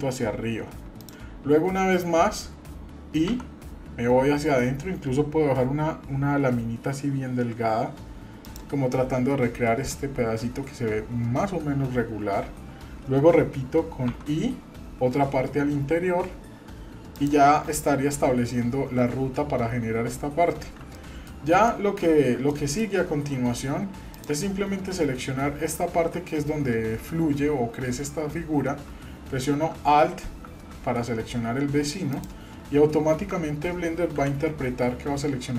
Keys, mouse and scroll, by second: 10.6-12.2 scroll down 2, 20.9 middle click, 21.4 scroll down 1, 21.7 middle click, 22.2 scroll up 1, 22.5 middle click, 24.1 click, 32.1 alt+click, 34.1 KP_7.